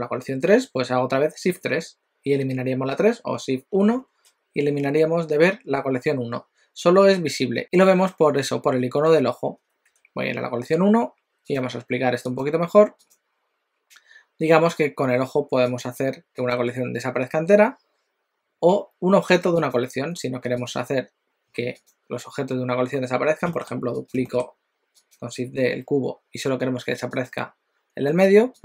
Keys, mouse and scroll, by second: 1.6 shift+3, 3.8 shift+1, 11.5 click, 12.4 click, 15.8 click, 19.7 click, 20.7 click, 21.7 click, 23.5 shift+d, 27.4 click.